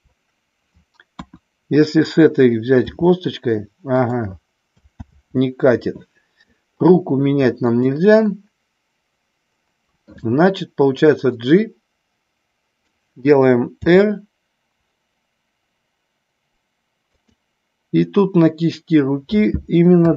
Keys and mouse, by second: 1.2 KP_1, 2.8 r, 3.9 click, 4.9 ctrl+z, 7.6-8.7 shift+drag, 11.4-12.9 drag, 13.9 r, 17.2 click.